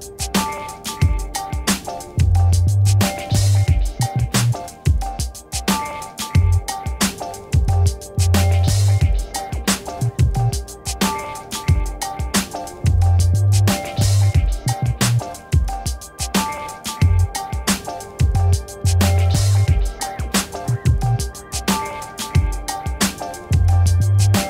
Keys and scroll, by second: 1.2-3.6 typing, 4.2 Return, 7.6 1, 8.3 Return, 14.0 t, 21.9 0, 22.5 c, 23.8 Return.